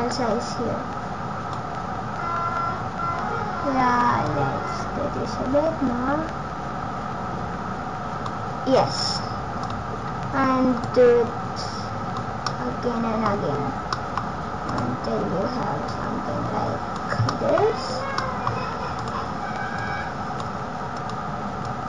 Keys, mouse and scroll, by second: 4.3 click, 9.7 click, 10.8 click, 12.5 middle click, 13.3 scroll up 1, 13.9 middle click, 14.7 click, 15.9 click, 17.3 middle click, 18.9 click, 19.8 click, 20.9 click, 21.7 click.